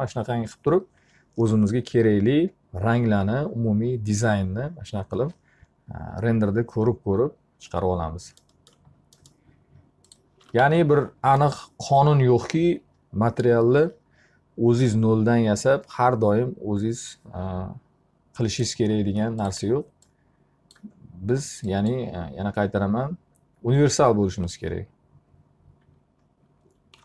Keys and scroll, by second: 10.0 t, 10.7 z, 26.6 space.